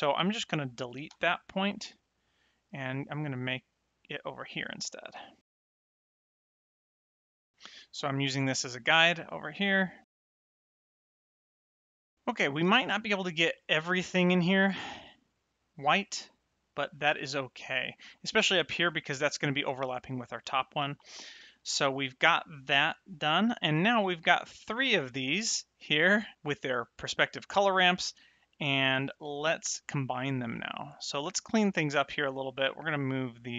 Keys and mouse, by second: 1.0 x, 1.5 click, 4.8 ctrl+click, 5.6 v, 5.7 click, 6.0 v, 6.2 click, 6.5 click, 7.3 click, 8.2 middle click, 10.1 click, 10.8 middle click, 11.3 click, 11.5 middle click, 14.8 middle click, 16.1 middle click, 21.5 middle click, 24.3 middle click, 29.7 click, 31.7 click, 33.0 click.